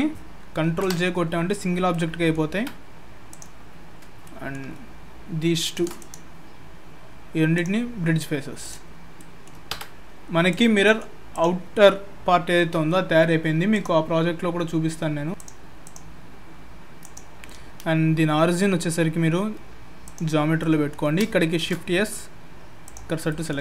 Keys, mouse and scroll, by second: 0.7 ctrl+j, 1.5-1.8 scroll up 5, 1.9 middle click, 2.5 Tab, 3.3 click, 4.2 middle click, 5.6 shift+click, 6.0 right click, 7.9-8.6 scroll down 3, 8.6 click, 8.6-9.7 scroll down 4, 9.2 middle click, 9.7 Tab, 10.0-10.5 scroll up 3, 10.5 click, 10.8 middle click, 11.3 click, 13.7 click, 15.4 click, 15.8 click, 17.0 right click, 20.6 middle click, 21.6 shift+s, 23.3 middle click.